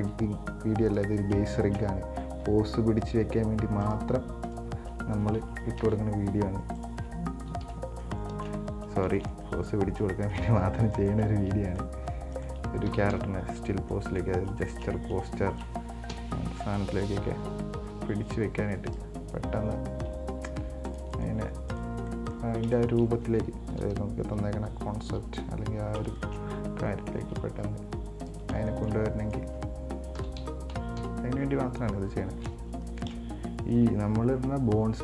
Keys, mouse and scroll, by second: 0.2 g, 1.6 shift+scroll up 1, 1.7-2.7 shift+middle drag, 2.7 g, 4.7 right click, 5.6 ctrl+z, 6.0 ctrl+z, 7.0 right click, 7.7 KP_1, 7.8 KP_3, 8.5 shift+middle click, 8.8-9.4 scroll up 3, 9.4-11.2 shift+middle drag, 11.2 right click, 11.8 right click, 12.6 right click, 13.1 KP_1, 13.3 KP_3, 14.1 middle click, 14.8 shift+right click, 15.7 shift+right click, 16.3 KP_1, 16.6 KP_3, 18.6 r, 20.2 g, 21.4 right click, 21.9 right click, 22.3 middle click, 23.0 shift+right click, 23.9 KP_1, 24.5 KP_2, 26.1 scroll up 3, 26.4-27.6 shift+middle drag, 27.6 g, 28.8 shift+middle click, 29.5 right click, 30.4 KP_1, 30.6 KP_3, 31.2 KP_9, 32.7-33.0 scroll up 3, 33.0 shift+middle click, 34.0 g.